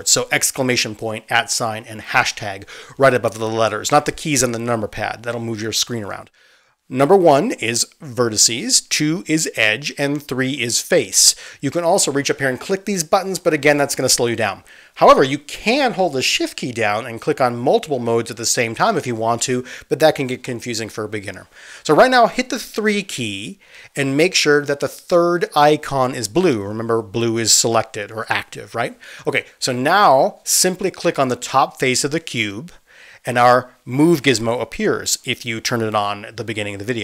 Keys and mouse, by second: 0.0-1.0 typing, 2.4 1, 3.1 2, 3.5 3, 4.6 1, 9.0 click, 10.1 2, 10.6 click, 11.2 middle click, 11.9 3, 12.2 click, 12.3-14.1 middle drag, 14.1-22.4 drag, 22.4 middle click, 22.7-31.7 drag, 24.4 3, 31.7-37.0 middle drag.